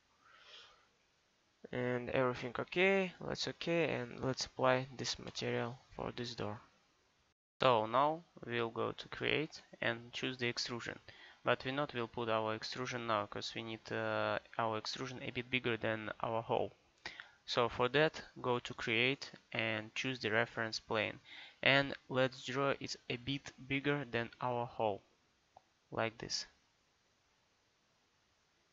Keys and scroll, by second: 0.0 r.